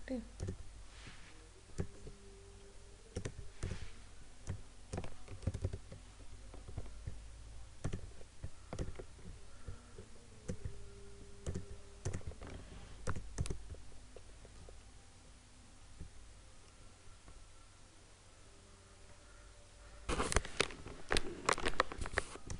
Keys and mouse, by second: 5.5 ctrl+=, 7.9-11.6 drag, 13.5 right click.